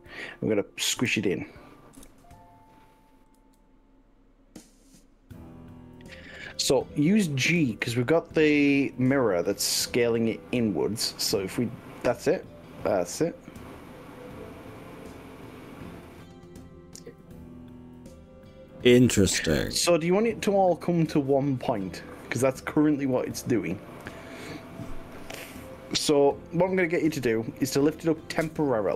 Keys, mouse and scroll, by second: 1.0 KP_3, 2.0 KP_1, 3.4 s, 6.4 click, 7.8 s, 8.6 click, 9.8 g, 16.2 click, 16.6-27.5 middle drag, 27.5 click, 28.4-28.9 middle drag.